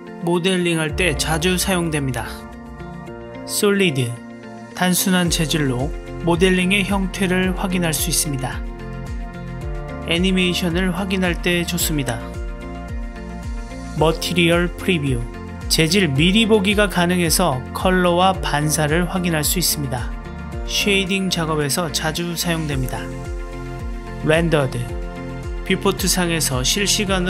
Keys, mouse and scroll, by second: 3.5 click, 5.4 click, 6.6-12.7 middle drag, 13.7-14.4 drag, 15.2-17.1 middle drag, 17.1-18.3 drag, 18.3-22.9 middle drag, 18.9 click.